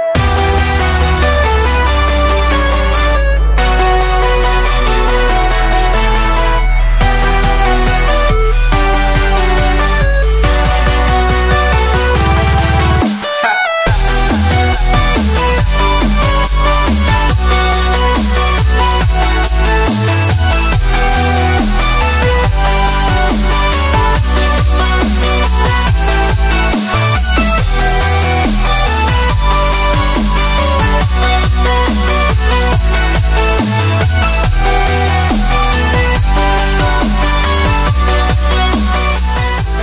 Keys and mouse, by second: 0.1 click, 2.0 click, 2.1-3.8 middle drag, 4.8-6.6 middle drag, 9.8 ctrl+click, 10.2 ctrl+click, 10.8 ctrl+click, 11.2 s, 12.2 r, 13.0 click, 13.9 r, 14.4 click, 14.7 click, 15.0 KP_0, 15.3 KP_0, 15.6 KP_0, 16.6 shift+click, 17.1 shift+click, 17.4 click, 19.1 click, 21.3 KP_0, 22.5-23.6 middle drag, 24.1 click, 25.0 click, 29.6-31.0 drag, 32.1 click, 33.0 click, 35.2 click, 35.8 middle click, 36.4 middle click, 37.6 ctrl+z, 37.9 middle click, 38.8 middle click.